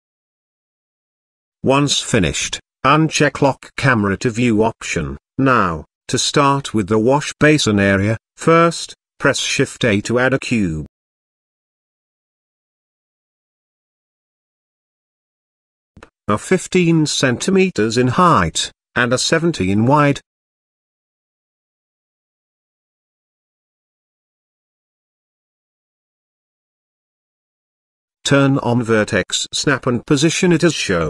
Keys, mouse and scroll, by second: 4.2 click, 4.6 middle click, 5.3 click, 7.1 click, 8.7 click, 9.4 shift+a, 13.0 click, 14.2-15.7 drag, 16.0-17.4 drag, 21.8 click, 22.7-24.3 drag, 24.7 middle click, 25.4 shift+middle click, 25.9 KP_Decimal, 27.3-27.9 shift+middle drag, 28.9-30.3 drag, 30.5 click.